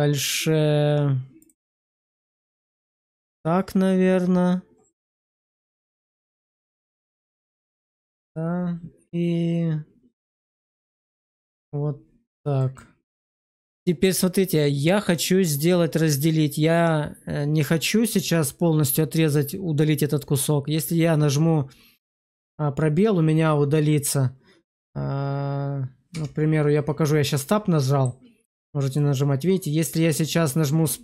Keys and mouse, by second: 1.3 click, 7.8 click, 12.5 click, 26.0 Tab, 27.2 middle click.